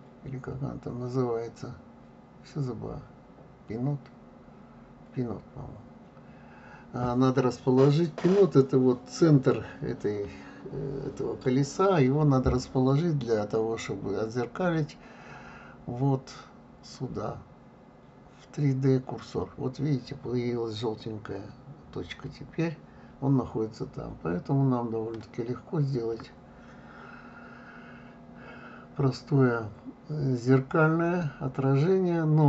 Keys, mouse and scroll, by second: 0.6 click, 3.9-6.2 drag, 6.2-9.2 middle drag, 15.7-18.7 drag, 27.0 click, 28.6-31.5 drag.